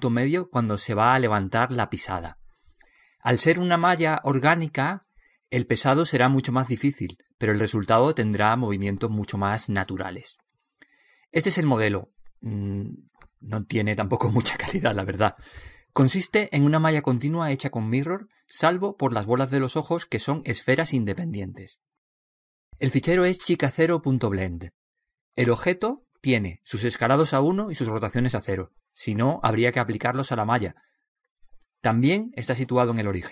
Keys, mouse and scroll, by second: 17.9-19.7 middle drag, 19.9 middle click, 20.7-24.3 drag, 24.3-25.7 middle drag, 26.9 click.